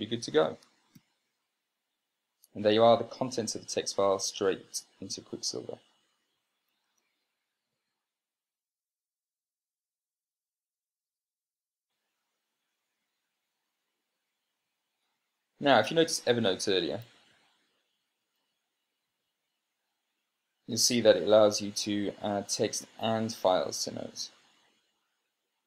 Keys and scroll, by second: 1.9 ctrl+p, 8.7 super+space, 17.0 super+space, 17.4-17.7 typing.